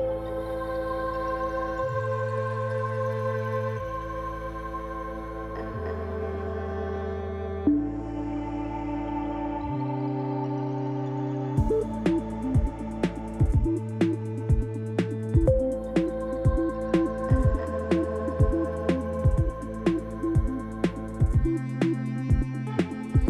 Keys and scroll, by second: 1.4 j, 5.4 Tab, 8.1 r, 9.7 alt+a, 13.8 Tab, 14.8 ., 17.5 ctrl+r, 17.9 Return, 18.4 shift+z, 20.4 x, 22.9 g.